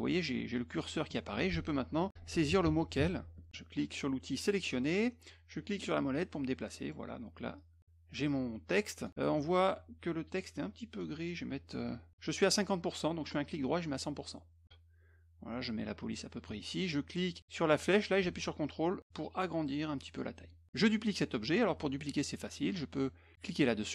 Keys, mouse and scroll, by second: 1.9-3.5 typing, 4.7 click, 5.9-7.6 middle drag, 7.6-9.1 drag, 10.6 click, 13.2 right click, 13.9 click, 14.6-16.1 drag, 17.6-20.2 drag.